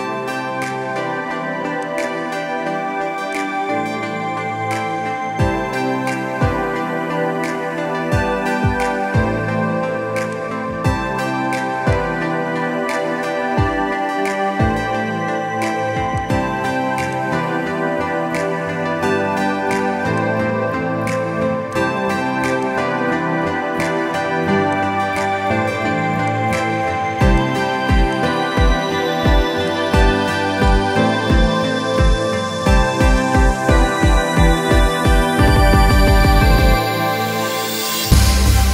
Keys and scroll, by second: 8.5 ctrl+b.